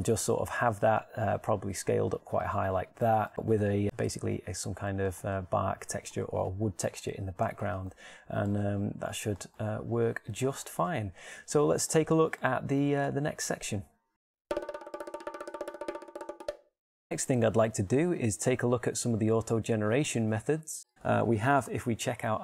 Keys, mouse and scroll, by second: 2.6 shift+s, 8.3 Tab, 11.0 middle click.